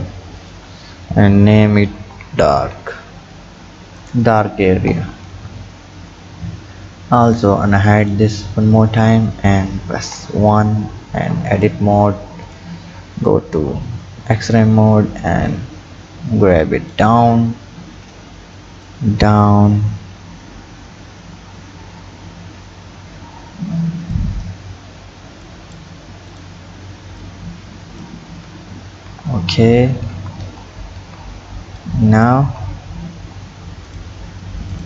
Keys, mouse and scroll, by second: 0.4-3.4 drag, 4.9 Tab, 7.3 click, 8.0 click, 10.0 KP_1, 11.2 Tab, 11.6 click, 12.5-13.5 drag, 13.5 b, 15.5-17.2 drag, 17.2-18.9 scroll up 6, 18.9-21.9 drag, 24.5 scroll down 4, 25.5 click, 26.3 drag, 27.2 click, 28.3 Tab, 28.9 Tab, 29.4-30.1 scroll up 1, 30.1 Tab, 30.4 Tab, 31.0 Tab, 31.8 click, 32.4 Tab, 33.9 click, 34.7 alt+click.